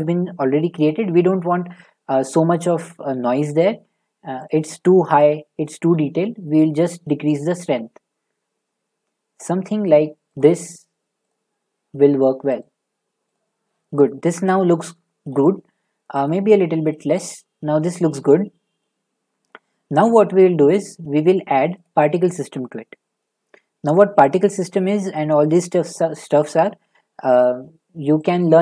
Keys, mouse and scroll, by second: 0.6 middle click, 2.6 click, 4.4 click, 5.3 middle click, 5.4 middle click, 5.6 middle click, 9.4 click, 10.4 click, 11.3 click, 12.6 click, 13.3 click, 15.3 middle click, 16.3 click, 18.8 middle click, 19.0 middle click, 19.1-21.6 scroll, 21.8 click, 23.2 middle click, 23.7 middle click, 23.8 middle click, 25.8 middle click, 28.2 click.